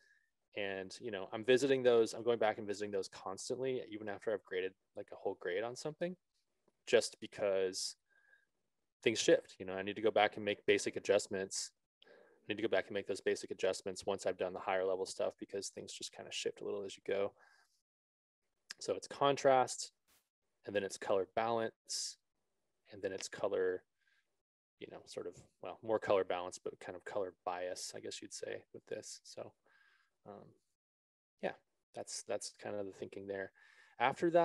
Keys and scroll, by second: 31.2 ctrl+z.